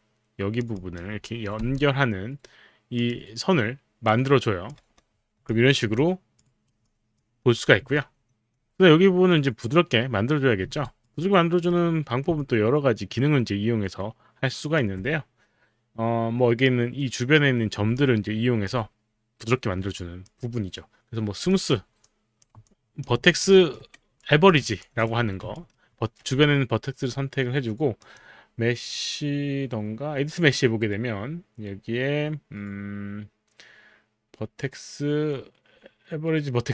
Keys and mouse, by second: 0.6 click, 3.0 click, 4.1 click, 4.7 y, 5.6 alt+click, 6.5 alt+right click, 7.1 alt+click, 7.6 alt+click, 10.7 w, 11.0 right click, 12.4-16.2 alt+drag, 18.0 alt+click, 20.0 alt+click, 22.0 alt+click, 22.4 click, 23.5 typing, 24.8 alt+click, 25.5 alt+click, 25.5 typing, 25.5 alt+right click, 28.0 click.